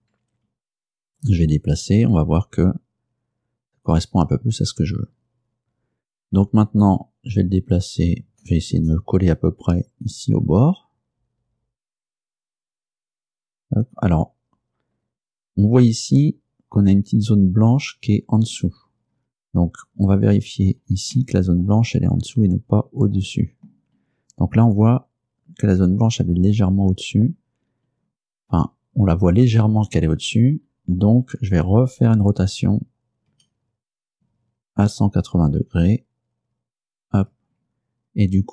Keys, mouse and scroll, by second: 1.4 g, 13.2 click, 15.0-16.3 scroll up 4, 19.2-19.7 scroll up 2, 19.8 scroll down 2, 20.6 scroll down 2, 20.8-21.2 scroll up 2, 21.2-24.0 middle drag, 25.0 scroll up 2, 27.7 scroll down 2, 28.5-29.0 scroll down 2, 29.2 scroll up 2, 30.3-31.0 scroll down 4, 33.4 r, 37.0 ctrl+click, 38.1-38.5 scroll up 2.